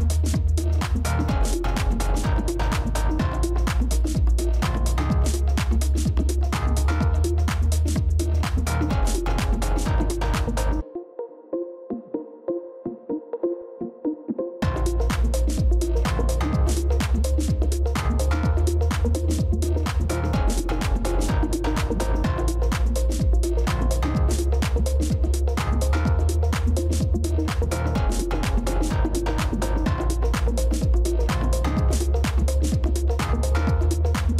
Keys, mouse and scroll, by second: 1.4 ctrl++, 1.9 space, 5.8 shift+click, 20.8-21.5 typing, 24.3 scroll up 1, 28.7 typing.